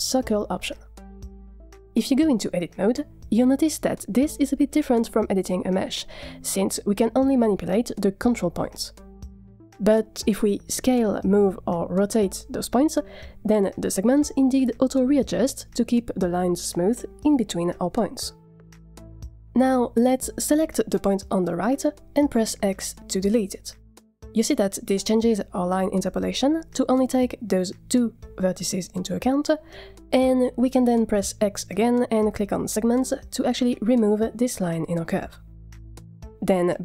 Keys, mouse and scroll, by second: 2.0 scroll up 3, 2.2 middle click, 2.7 Tab, 8.5 click, 10.5 s, 14.5 s, 21.3 click, 22.5 x, 27.1 click, 28.2 shift+click, 32.1 x.